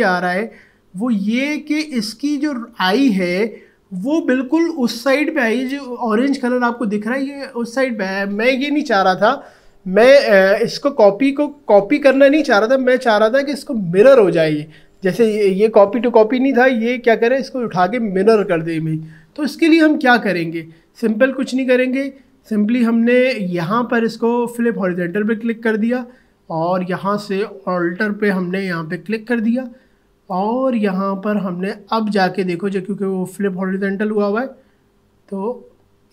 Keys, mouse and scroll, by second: 21.2 ctrl+z, 25.0-36.1 drag.